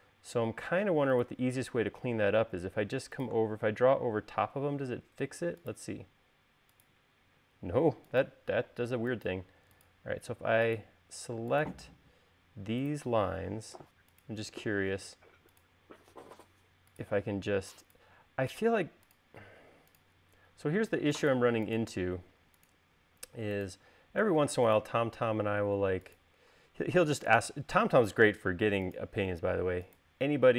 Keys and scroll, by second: 9.4 space.